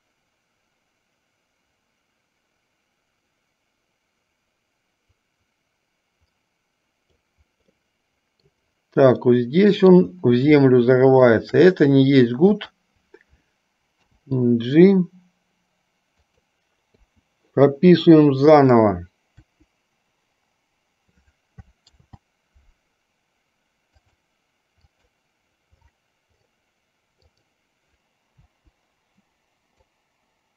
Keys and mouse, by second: 8.0-8.7 middle drag, 9.5-10.2 middle drag, 10.8-11.6 shift+middle drag, 12.7 click, 14.1 g, 17.2 i, 18.6 click, 19.6 Delete, 22.2 ctrl+z, 24.1 click, 25.0 click, 27.3 click, 28.5 Delete, 30.0-30.5 drag.